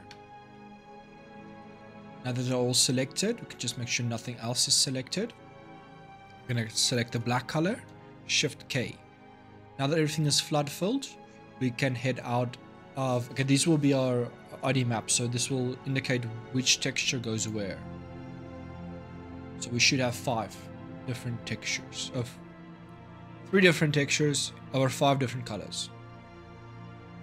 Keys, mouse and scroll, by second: 0.3-5.2 middle drag, 6.8 click, 8.4 shift+k, 10.0-13.8 middle drag, 15.2-17.1 middle drag, 17.1 click, 18.2-21.4 middle drag.